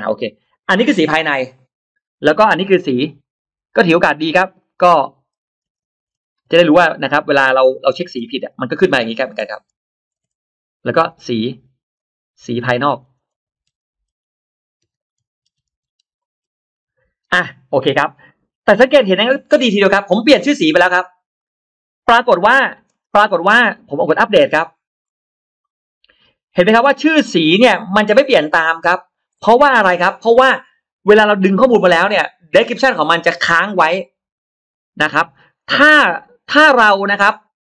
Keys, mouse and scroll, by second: 0.0 o, 3.1 click, 4.4 click, 5.3-8.1 typing, 9.3 BackSpace, 10.0 BackSpace, 10.0 1, 12.2-17.1 typing, 21.2 click, 22.5-22.8 scroll up 1, 23.1 space, 23.1 click, 24.6-25.2 scroll up 2, 25.5 click, 27.9 click, 28.5 click.